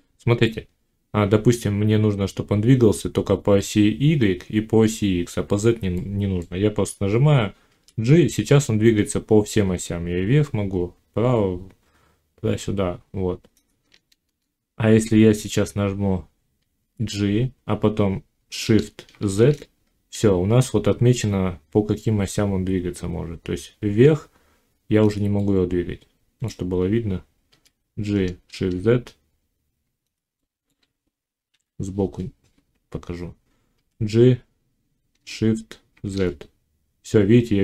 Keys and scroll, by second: 7.5 g, 14.0 shift+Tab, 16.6 g, 18.9 shift+z, 27.3 g, 28.3 shift+z, 31.3 1, 33.6 g, 35.8 shift+z.